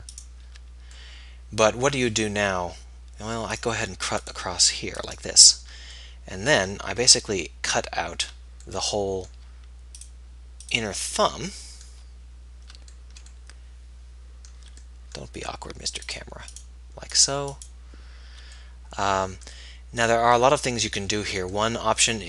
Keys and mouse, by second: 1.2 middle click, 6.3 middle click, 11.6-12.6 middle drag.